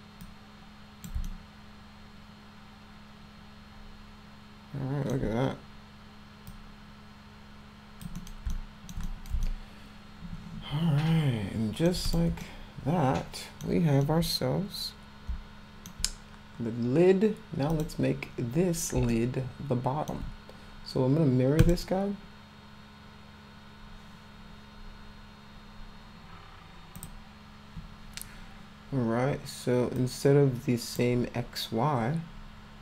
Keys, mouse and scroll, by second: 0.3 click, 1.3-5.1 alt+middle drag, 6.5-8.0 drag, 8.2 middle click, 8.5 alt+middle click, 9.1 middle click, 9.5-11.9 alt+middle drag, 12.1 click, 12.4-13.7 alt+middle drag, 14.0-15.9 alt+middle drag, 17.7 click, 19.1-20.1 alt+middle drag, 21.6 click, 27.0 click, 30.0 click.